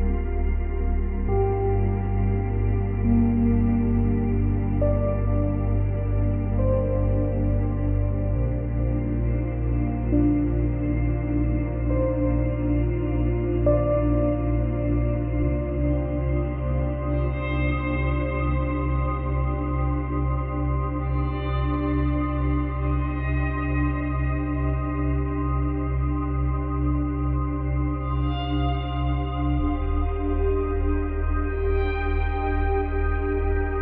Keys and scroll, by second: 3.1 space, 6.7 space, 8.3 space, 9.2 space, 22.9 space, 24.5 space, 27.3 space, 28.3 space.